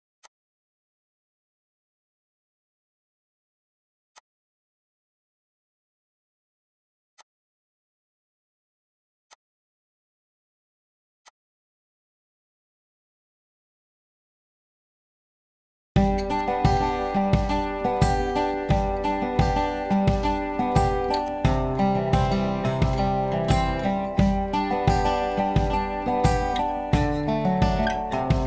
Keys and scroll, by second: 1.0-2.6 typing.